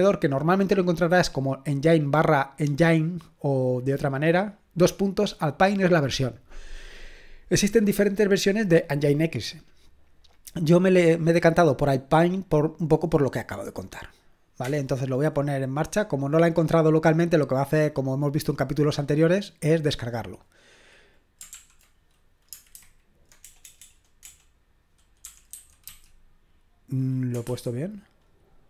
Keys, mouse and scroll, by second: 21.5 ctrl+p, 22.8 alt+b, 23.4-26.4 typing, 27.4 typing.